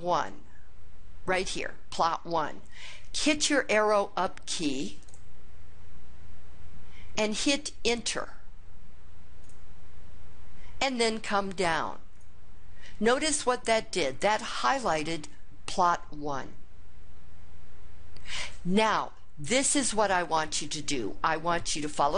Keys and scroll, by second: 5.0 ^, 9.4 Return, 12.1 2.